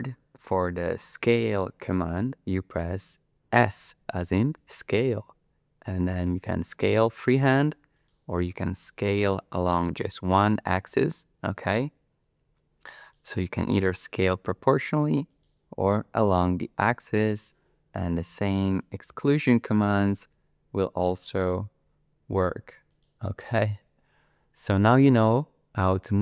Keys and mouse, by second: 4.6 s, 8.0 click, 8.9 s, 10.0 x, 13.1 click, 14.5 s, 15.3 click, 15.9 s, 16.2 z, 17.2 click, 18.3 s, 19.2 shift+z, 22.9 click.